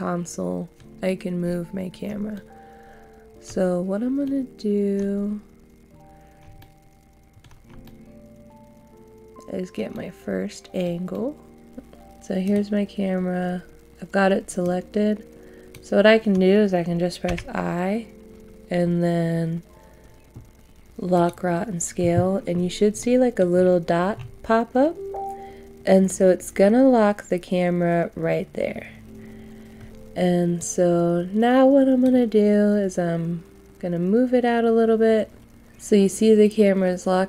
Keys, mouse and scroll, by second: 3.7-4.2 scroll down 1, 4.2 middle click, 5.2-5.5 scroll up 1, 6.5 middle click, 7.8 shift+middle click, 9.9 middle click.